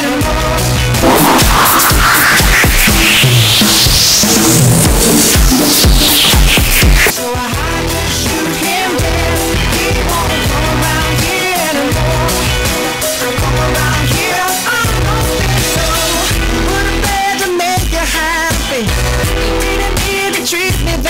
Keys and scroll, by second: 7.5 Page_Down.